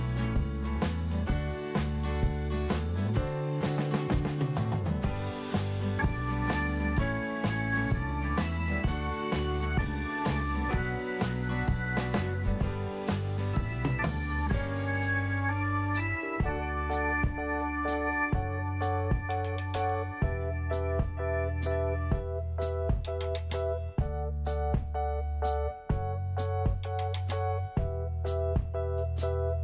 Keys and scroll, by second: 0.0-0.1 typing, 1.1 f, 1.5 z, 1.9 alt+q, 2.5 ctrl+v, 3.2 alt+q, 7.9 alt+r, 9.5 ctrl+i, 9.8 Delete, 11.0 alt+r, 11.4 Delete, 12.3 alt+r, 12.7 Delete, 13.7 Delete, 15.7 Delete, 22.5 alt+q, 26.8 Left, 27.0 BackSpace, 27.3 2, 27.4 Return, 28.7 BackSpace, 28.8 Return.